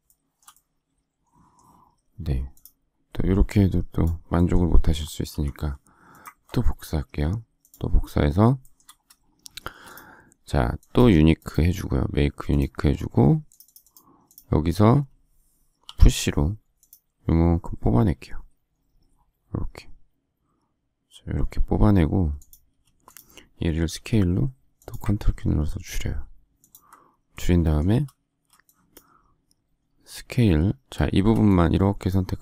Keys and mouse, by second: 5.2 m, 9.5 shift+space, 15.8 p, 22.7 space, 23.8 s, 28.2 space, 30.3 s, 31.1 space.